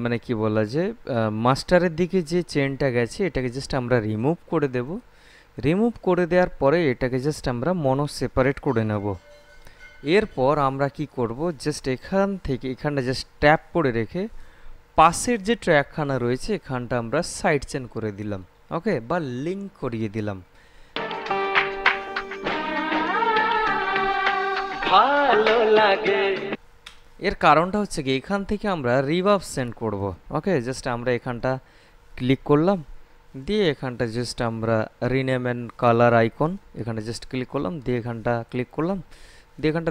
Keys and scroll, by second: 21.2 space, 26.7 space.